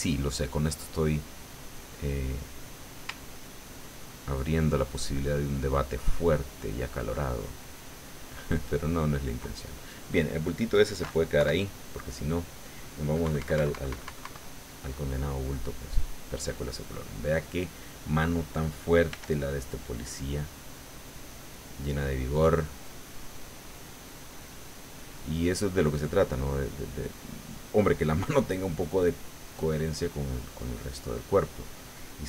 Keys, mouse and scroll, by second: 0.3 middle click, 0.3-1.7 drag, 1.8 click, 3.3-6.9 ctrl+drag, 6.2 ctrl+middle click, 7.0 ctrl+middle click, 9.1 ctrl+click, 9.4 ctrl+middle click, 13.7 KP_1, 14.1 KP_Subtract, 14.9-16.9 middle drag, 19.1 f, 19.7 click, 20.5 click, 21.4 click, 22.2 click, 23.1 click, 24.2 click, 25.3 click, 26.0 click, 26.7 click, 27.1 click, 27.9-31.7 drag, 31.7 middle click.